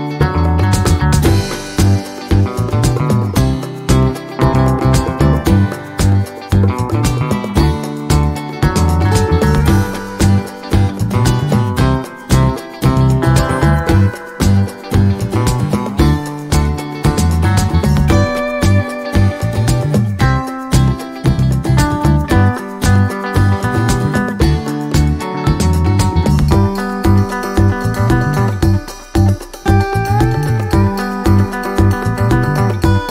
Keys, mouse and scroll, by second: 0.2 click, 1.2 ctrl+shift+click, 2.2-5.6 ctrl+shift+drag, 6.5 alt+Right, 7.2 alt+Down, 7.7 alt+Up, 8.3 alt+Down, 9.5-13.2 drag, 15.4-16.5 ctrl+shift+drag, 16.7 ctrl+shift+click, 18.2 shift+click, 19.5 ctrl+d, 20.9 shift+click, 21.4 shift+click, 22.7 click, 27.4 click, 28.5-29.6 drag, 30.2 click, 31.6 click, 32.9 click.